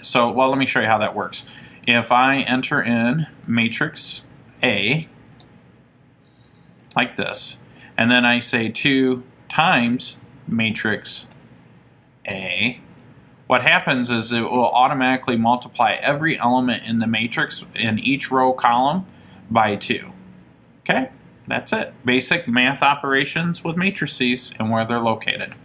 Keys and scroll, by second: 5.6 Return, 7.0 Return, 8.8 2, 12.7 Return, 13.2 Return.